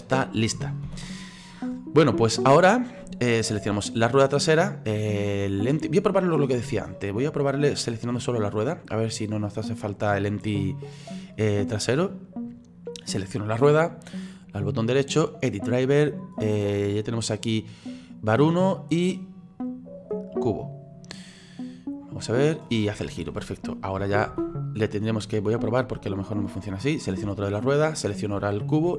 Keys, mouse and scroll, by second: 0.9 ctrl+z, 5.5 right click, 7.7 right click, 14.4-20.4 right drag, 21.6 right click, 22.3-24.3 drag, 24.3 ctrl+z, 25.0 right click, 27.9 shift+right click.